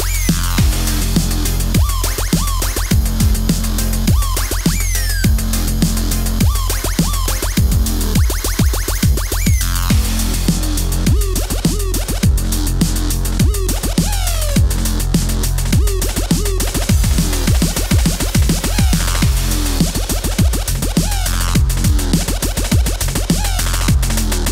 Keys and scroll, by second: 4.4 super+s, 6.8 t, 8.4 KP_4, 8.7 KP_1, 8.8 Home, 10.0 Home, 11.3 KP_8, 11.7 KP_5, 12.6 KP_3, 12.6 KP_5, 14.8 t, 16.1 super+z, 16.4 KP_0, 16.7 space, 17.3 space, 18.0 super+s, 18.3-20.2 typing, 18.8 super+s, 24.4 KP_5.